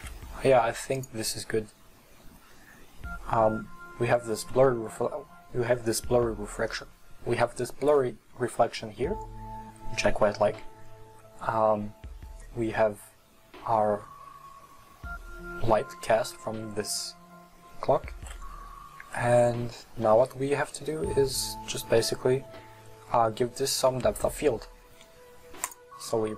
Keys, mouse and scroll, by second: 25.7 click.